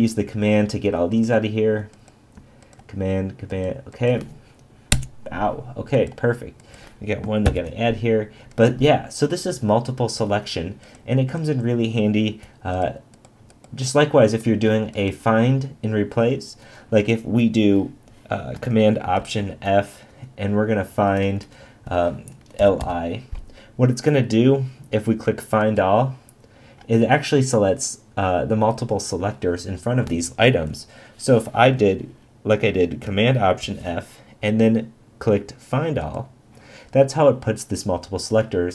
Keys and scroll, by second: 7.4 shift+<, 19.2 alt+super+f, 33.6 alt+super+f.